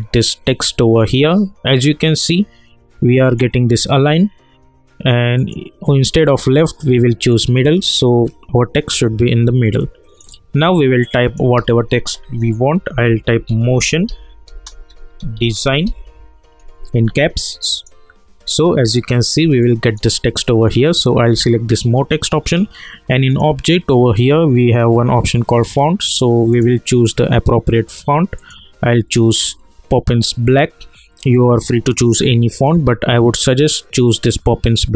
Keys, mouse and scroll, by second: 3.2 click, 9.7-11.2 alt+drag, 11.5 ctrl+a, 12.6-16.3 typing, 17.7 click, 18.6-19.2 scroll down 1, 19.6-21.2 alt+drag, 26.5 click.